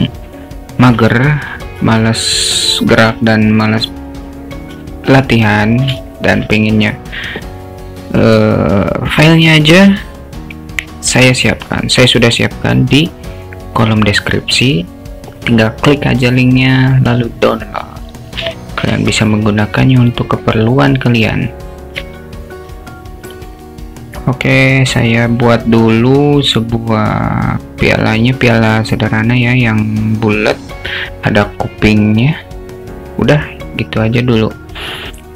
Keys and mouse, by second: 1.0 s, 4.8 s, 6.2 alt+shift+middle click, 18.6 alt+shift+middle click, 19.2 s, 22.1 s.